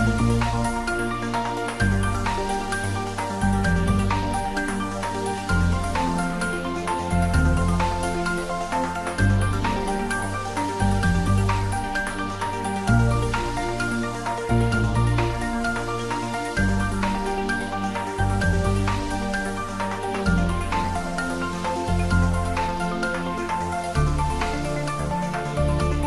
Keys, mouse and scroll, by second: 1.0 click, 2.2 click, 4.8 click, 8.3-11.7 middle drag, 11.7 click, 12.0 Tab, 12.5 click, 13.4 3, 14.2 click, 15.1 shift+click, 18.5-22.3 drag.